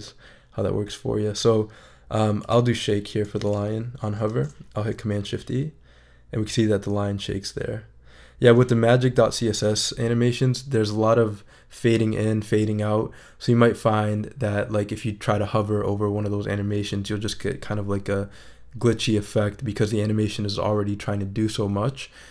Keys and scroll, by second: 4.3 shift+super+e.